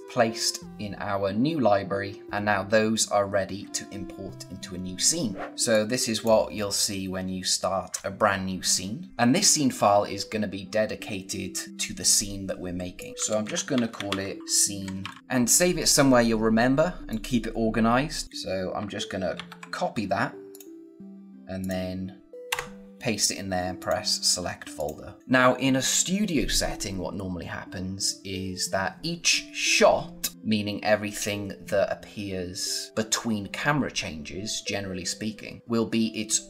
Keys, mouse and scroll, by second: 5.6 click, 12.9-14.9 typing, 12.9 click, 15.2 click, 17.0 click, 19.2 ctrl+c, 20.4 click, 22.3 v, 22.4 Return, 23.7 click.